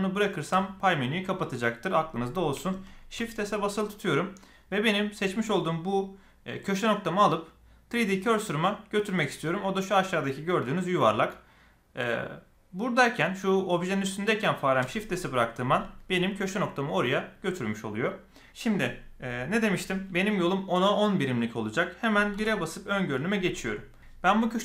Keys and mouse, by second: 3.1 shift+s, 22.3 KP_1.